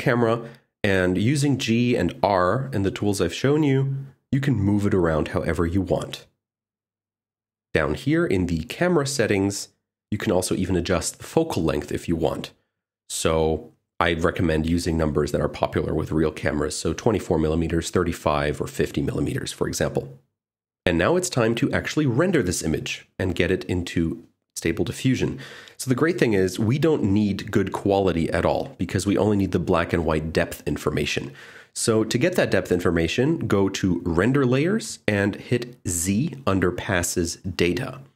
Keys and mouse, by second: 1.2 click, 1.3 r, 2.0 ctrl+z, 2.3 g, 2.6 z, 2.7 z, 3.8 click, 4.0-5.0 typing, 6.9 click, 11.2 click, 16.6-17.9 drag, 18.9 click, 35.0 click.